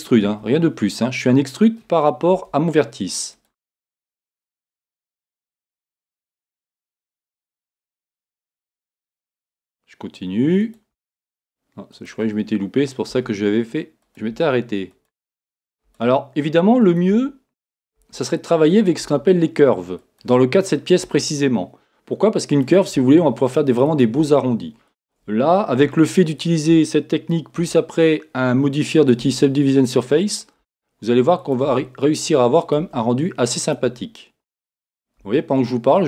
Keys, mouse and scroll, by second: 9.4 e, 26.0-29.2 shift+middle drag, 27.6 e.